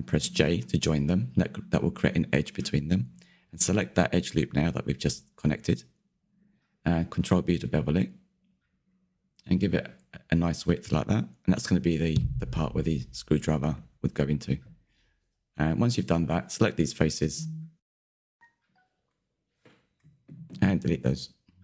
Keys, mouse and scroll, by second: 1.0 j, 1.7 click, 2.7 2, 3.5 alt+click, 3.9-7.2 middle drag, 7.2 ctrl+b, 11.1-11.5 scroll down 4, 11.5-12.8 middle drag, 12.8 scroll up 2, 12.9-14.1 scroll, 14.1 3, 14.8 click, 15.2-16.5 middle drag, 16.5 ctrl+click, 16.9-21.6 middle drag.